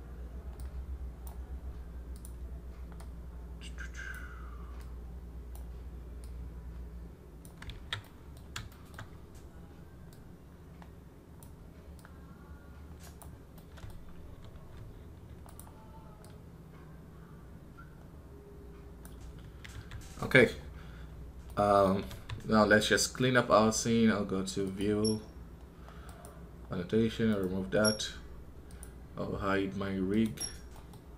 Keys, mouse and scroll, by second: 27.2-31.0 drag, 31.0 n.